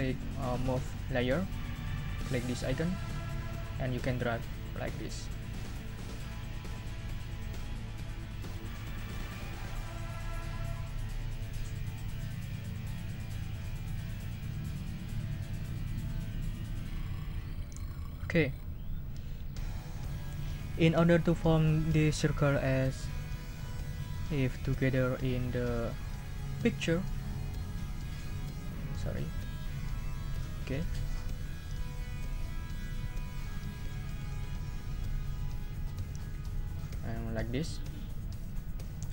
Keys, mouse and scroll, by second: 2.9 click, 4.3-6.6 drag, 6.7-17.9 drag, 26.0 click, 27.8 scroll up 1, 27.9-28.6 scroll down 2, 28.6-29.9 scroll down 1, 29.9 scroll down 1, 32.2 click, 36.8 click, 38.4 click.